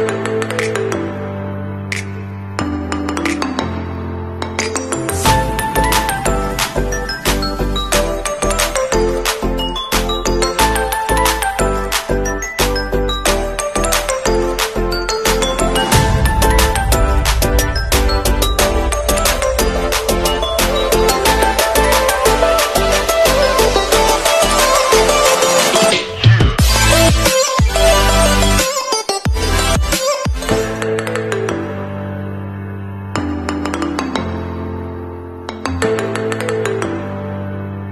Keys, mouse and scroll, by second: 1.1 alt+scroll down 1, 5.0 alt+scroll down 1, 5.7 alt+scroll up 1, 6.4 alt+scroll down 1, 11.6-12.9 scroll down 1, 27.8 ctrl+a, 29.1 click, 30.3 ctrl+d, 31.3 alt+d, 31.5 alt+scroll up 1, 32.6 alt+shift+click, 32.8 alt+shift+click, 33.6 alt+click, 34.8 t, 36.3 v, 37.7 t.